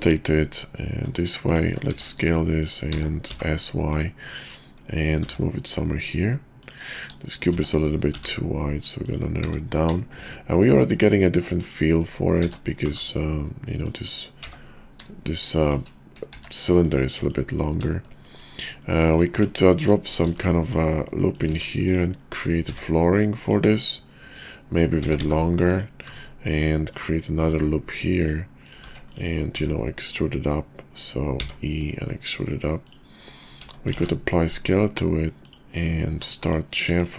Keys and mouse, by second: 2.0 s, 2.9 s, 5.2 g, 7.5 s, 9.4 g, 12.4 s, 14.3 g, 16.3 q, 18.1 shift+drag, 18.6 click, 19.1 click, 19.3 Tab, 20.3 ctrl+r, 21.5 Tab, 21.9 click, 22.6 e, 25.0 g, 26.0 `, 27.3 ctrl+r, 28.9 Tab, 29.1 click, 29.6 `, 31.3 e, 33.6 Tab, 33.9 ctrl+a, 36.1 Tab, 36.9 ctrl+b.